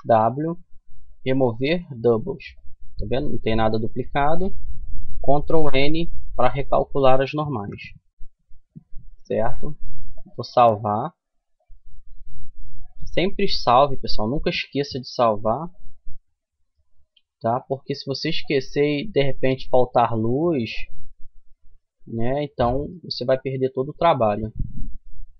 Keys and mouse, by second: 5.0 ctrl+n, 5.9 a, 6.9 KP_1, 9.6 click, 12.4-19.2 middle drag, 20.6-22.2 middle drag, 23.4-25.3 middle drag.